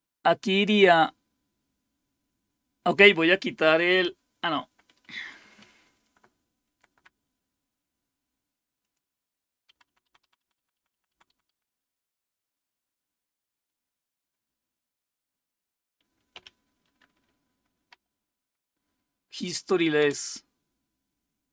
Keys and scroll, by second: 5.6-6.9 Up, 7.1 Up, 9.7 Up, 9.9 Up, 10.0 Up, 10.2 Up, 10.4 Up, 10.6 Up, 10.7 Up, 10.9 Up, 11.1 Up, 11.3 Up, 11.5 Up, 16.3 q, 17.9 Up, 20.1 Return.